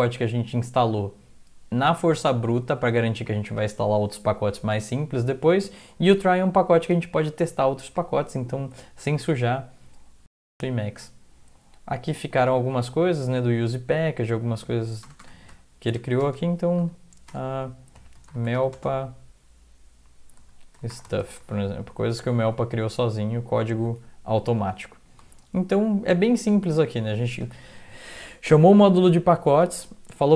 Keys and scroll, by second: 15.0 Return, 15.2-19.0 typing, 20.1-21.7 typing, 21.8 Up, 22.1 Up, 22.3 Up, 22.5-24.0 Up, 24.0-25.2 Down, 25.1-26.2 typing, 26.3 Up, 27.2 Down, 28.4-30.1 typing.